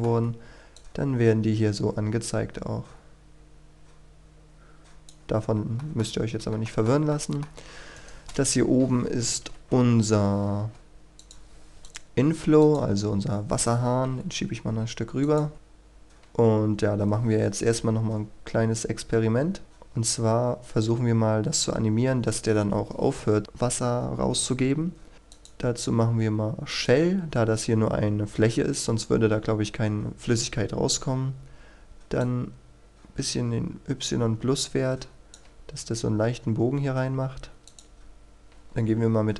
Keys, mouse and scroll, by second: 0.8-5.5 drag, 5.8 shift+middle click, 6.7 shift+middle click, 8.0 right click, 8.6 KP_1, 8.9-9.8 scroll down 1, 9.8 KP_3, 10.3-10.7 scroll up 1, 10.7 shift+middle click, 11.2 click, 14.5 g, 15.3 click, 19.0 scroll down 1, 19.2-25.1 scroll up 1, 25.3-35.6 drag.